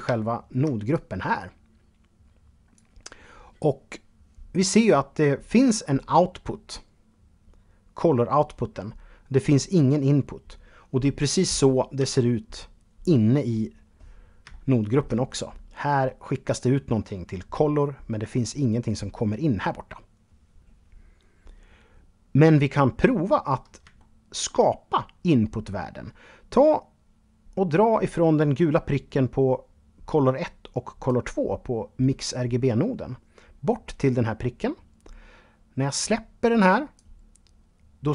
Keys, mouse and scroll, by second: 0.1 click, 3.3-5.1 scroll up 2, 11.2 Tab, 12.3-13.1 scroll down 1, 13.1-13.6 scroll down 1, 14.0-16.0 shift+middle drag, 23.1-25.4 shift+middle drag, 30.2-36.2 drag.